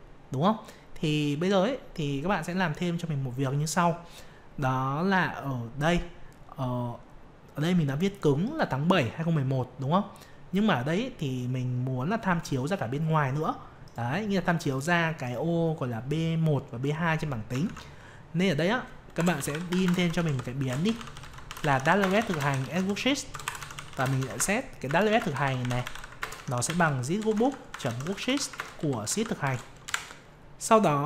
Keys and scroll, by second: 17.6 alt+Tab, 24.3 ctrl+space.